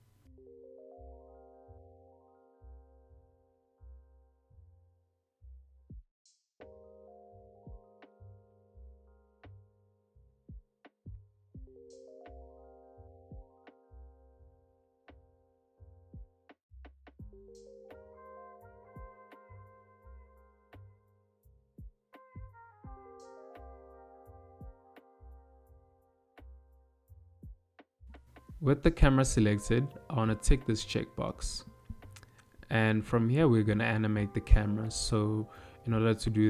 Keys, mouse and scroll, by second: 24.3 n, 25.4 n, 27.4 click, 27.6 click, 31.0 click, 31.2 click, 32.2 n.